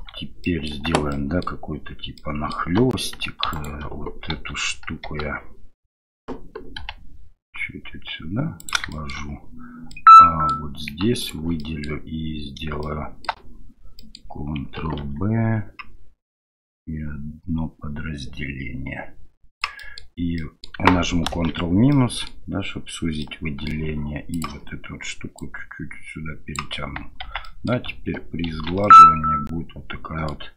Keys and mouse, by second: 0.4 middle click, 0.7 Tab, 1.1 middle click, 2.2 middle click, 2.8 2, 3.5 alt+click, 4.3 KP_1, 5.0 KP_3, 6.8 g, 8.9 shift+middle click, 9.9 middle click, 11.2 alt+click, 11.6 middle click, 12.8 shift+middle click, 14.0 middle click, 15.0 ctrl+b, 19.8 middle click, 20.4 middle click, 21.2 ctrl+KP_Subtract, 21.9 middle click, 23.2 middle click, 24.4-26.6 drag, 27.4 middle drag, 28.5 ctrl+3, 28.8-30.3 middle drag.